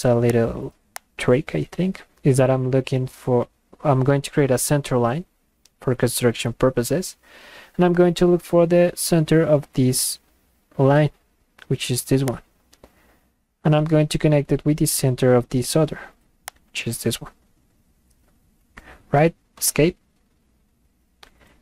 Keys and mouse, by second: 0.3 click, 1.0 click, 12.3 click, 16.5 click, 19.9 Escape.